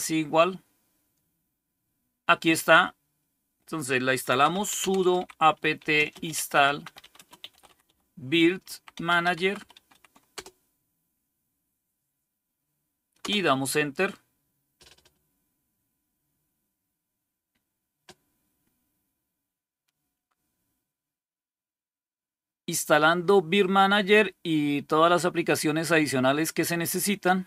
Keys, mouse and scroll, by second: 4.1-10.7 typing, 12.9-13.6 typing.